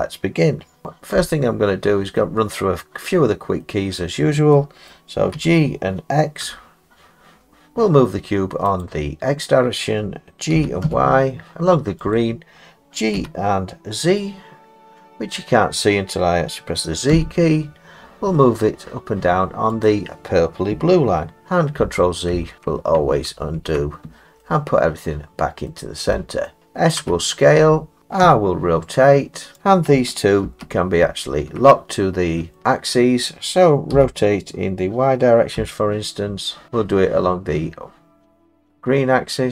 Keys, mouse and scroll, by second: 1.2 middle click, 3.1 middle click, 3.2 middle click, 4.0 middle click, 4.9 middle click, 4.9 middle click, 5.4 g, 6.4 x, 8.8 click, 10.6 g, 10.8 y, 12.2 click, 13.2 g, 17.1 z, 19.9 click, 21.8 ctrl+z, 22.3 ctrl+z, 23.3 ctrl+z, 25.7 middle click, 26.5 middle click, 26.5 middle click, 27.0 s, 28.0 click, 28.2 r, 29.6 click, 30.5 ctrl+z, 31.0 ctrl+z, 32.6 middle click, 32.6-33.9 scroll, 33.9 r, 35.6 y.